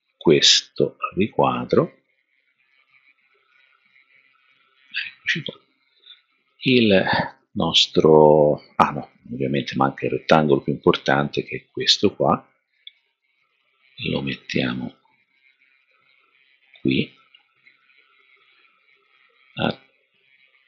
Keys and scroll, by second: 12.8 super+d.